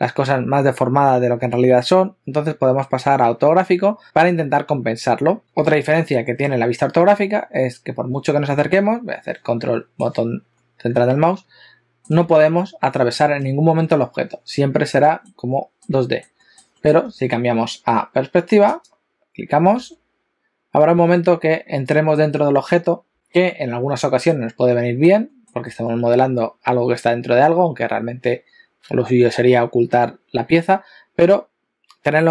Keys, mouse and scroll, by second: 9.0 ctrl+middle click, 10.5 ctrl+middle click, 12.4 shift+middle click, 13.2 shift+middle click, 13.5 ctrl+middle click, 15.6 ctrl+middle click, 16.4 ctrl+middle click, 16.8 ctrl+middle click, 18.6 click, 20.0 ctrl+middle click, 23.1 ctrl+middle click, 24.8 ctrl+middle click, 25.3 ctrl+middle click, 31.4-32.1 scroll down 2.